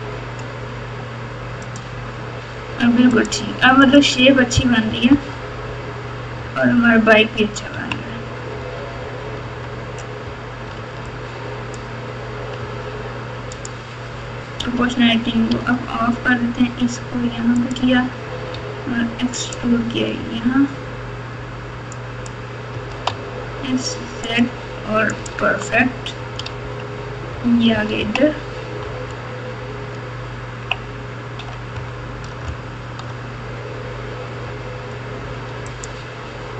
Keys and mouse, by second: 2.8 Tab, 3.1 click, 3.2 drag, 4.8-7.7 typing, 9.4 Tab, 10.7 alt+z, 11.0 click, 11.3 click, 12.5 r, 14.6 o, 15.5 g, 20.1 e, 20.1 g, 22.7 s, 25.2 click, 25.4 Tab, 26.4 alt+z, 27.3-29.0 typing, 30.3 KP_2, 30.6 KP_2, 31.4 KP_8, 32.4 KP_Add, 32.9 KP_Add, 33.0 KP_Add, 33.1 KP_Add, 34.4 Tab, 35.6 click.